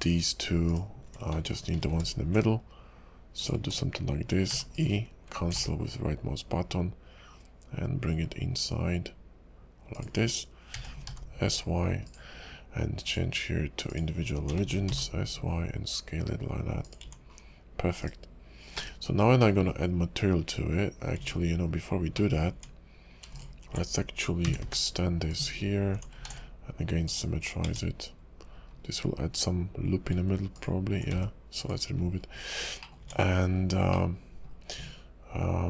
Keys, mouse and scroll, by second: 0.7 alt+shift+click, 1.8 ctrl+b, 4.5 e, 5.5 alt+s, 10.2-10.7 scroll up 2, 10.7 s, 13.0 click, 14.5 s, 17.0 Tab, 17.3 scroll down 4, 18.0 /, 18.7 /, 19.4 middle click, 19.6 KP_5, 21.2 Tab, 21.2-22.1 scroll up 1, 22.1 middle click, 22.5 Tab, 23.7 alt+click, 24.4 g, 25.9 Tab, 26.3 alt+x, 27.0 click, 27.6 Tab, 28.0-28.8 scroll up 10, 29.4 scroll up 1, 30.5 alt+click, 31.1 x, 31.9-32.5 scroll down 12, 32.8 middle click, 33.0 Tab, 33.5 scroll down 2, 33.9 middle click.